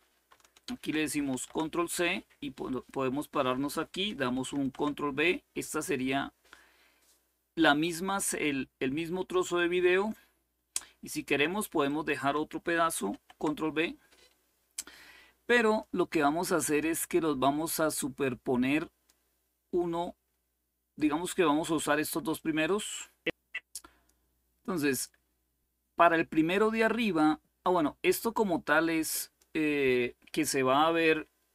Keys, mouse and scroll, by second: 1.0 ctrl+c, 2.4 click, 4.3 ctrl+v, 5.8-10.6 drag, 11.6 click, 12.8 ctrl+v, 15.4-16.4 drag, 16.5-19.4 drag, 22.1-23.8 drag, 26.7 click, 28.0-29.2 drag.